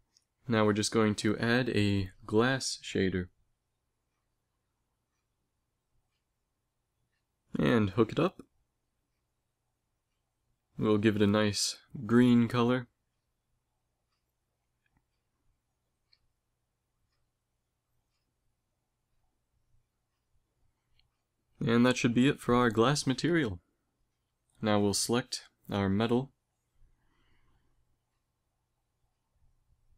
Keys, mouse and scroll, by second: 0.1 shift+a, 7.9-9.7 drag, 10.4-12.7 drag, 15.2 middle click, 16.3-18.5 drag, 20.9 middle click, 25.0-26.8 drag, 27.3 a, 28.5-29.5 right drag, 29.5 x.